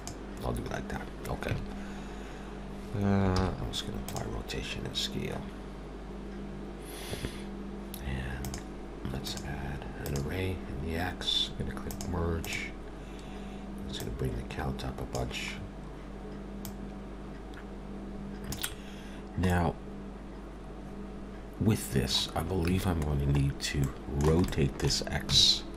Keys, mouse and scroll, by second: 1.5 Tab, 3.5 ctrl+a, 8.4 click, 9.2 click, 11.9 click, 12.4 click, 14.0 click, 15.5 scroll down 3, 16.6 click, 18.9-19.5 scroll down 2, 19.5 middle click, 22.7 Tab, 23.3-23.7 scroll up 2, 23.8 middle click, 24.5 shift+middle click, 25.3 r.